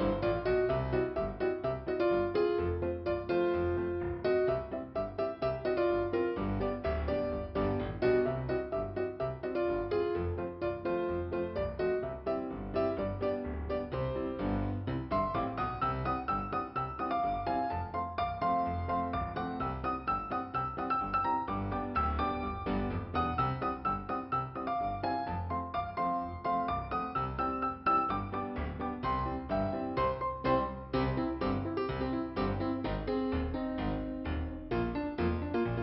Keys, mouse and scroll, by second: 1.7 click, 7.1 click, 8.7 click, 10.0 click, 10.1 click, 15.5 alt+t, 16.6 scroll up 2, 19.0 click, 20.2 click, 21.6 click, 24.8 click, 29.6 click, 29.9 click, 30.1 double click, 30.5 double click, 33.6 click, 33.6 click.